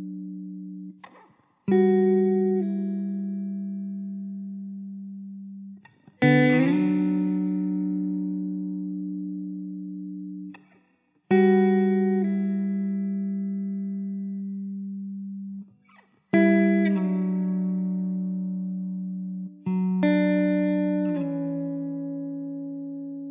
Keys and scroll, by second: 0.1 ctrl+x, 0.9 Tab, 3.3 Tab, 4.3 shift+d, 7.9 s, 9.4 s, 10.2 ctrl+z, 10.6 s, 11.5 s, 14.3 r, 15.0 ctrl+z, 19.0 s, 21.9 KP_0.